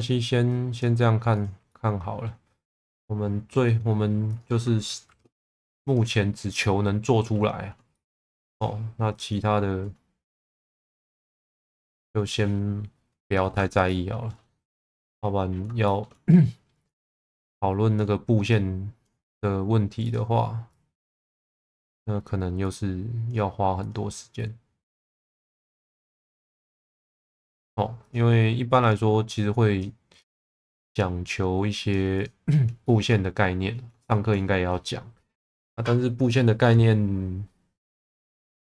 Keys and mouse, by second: 0.4 click, 1.4 click, 1.6 middle click, 5.0 shift+v, 6.6 middle click, 7.9 shift+middle click, 8.5 click, 10.3 click, 13.8 shift+middle click, 14.8 click, 15.8 shift+middle click, 18.4 click, 20.6 click, 25.4 click, 28.1 click, 28.8 click, 29.3 click, 30.2 click, 30.9 click, 32.1 click, 32.8 shift+middle click, 34.0 shift+middle click, 38.5 3.